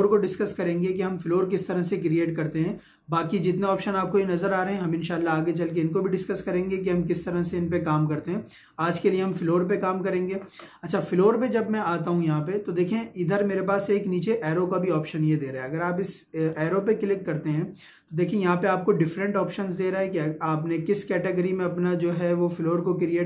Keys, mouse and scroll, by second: 2.9 2, 4.8 ctrl+2, 9.2 Escape, 16.6 click.